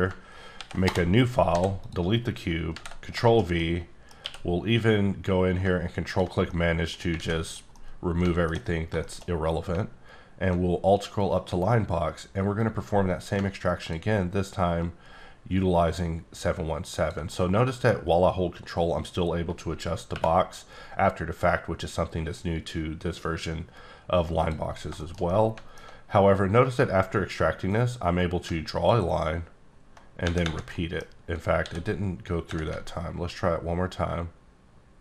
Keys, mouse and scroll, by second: 0.5 ctrl+n, 0.8 Return, 1.5 x, 1.8 click, 2.1 scroll up 1, 2.7 ctrl+v, 3.2 shift+middle click, 4.2 q, 6.5 middle click, 7.5 click, 7.7 middle click, 8.8 scroll up 4, 9.0 shift+middle click, 9.9-10.3 alt+scroll up 1, 12.6-14.1 drag, 16.5 click, 17.3 middle click, 20.1 y, 24.4 click, 24.7 scroll down 3, 25.0 shift+middle click, 25.8 alt+scroll up 2, 27.7 click, 30.7 middle click, 31.1 scroll up 2, 31.6 d, 33.0-33.3 alt+scroll up 1, 33.5-34.8 alt+scroll down 3.